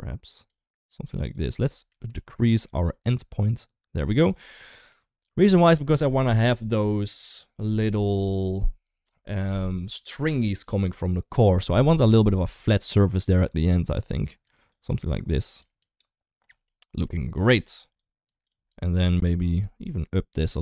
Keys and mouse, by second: 0.1 click, 0.8 click, 1.1 click, 1.8 middle click, 2.7-4.1 shift+drag, 4.5 middle drag, 11.9 middle drag, 12.7 middle click, 13.6 click, 14.2 click, 15.1 click, 16.5-16.8 middle drag, 17.7 click, 18.2 click, 18.3 click, 18.8 click, 19.3 click, 20.4-20.6 drag.